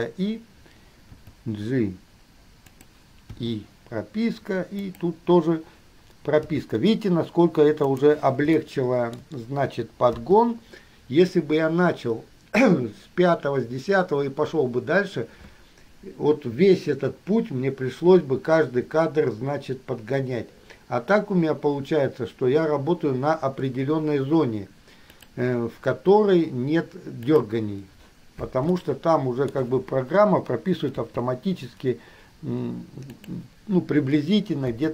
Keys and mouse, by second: 1.4 g, 3.5 i, 5.0 click, 6.8 g, 8.8-9.4 shift+middle drag, 10.4 i, 27.5 drag, 29.0-29.8 shift+middle drag, 31.3 g.